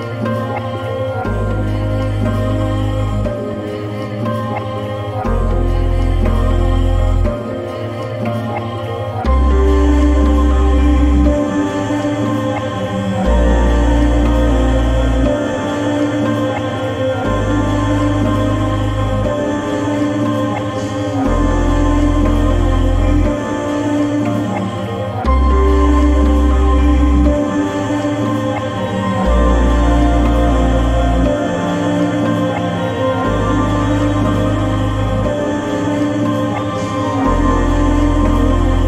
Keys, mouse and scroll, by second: 5.6 right click, 8.0 click, 10.6 click, 13.6 click, 13.7-17.0 drag.